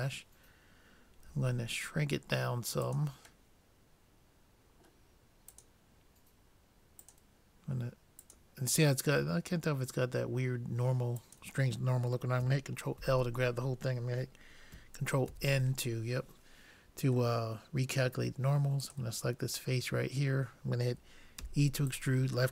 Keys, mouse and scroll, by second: 1.3 s, 3.6 middle click, 5.5 click, 9.5 middle click, 11.2-13.0 drag, 13.0 ctrl+l, 15.8 ctrl+n, 17.4 middle click, 18.9-20.6 drag, 21.5 e.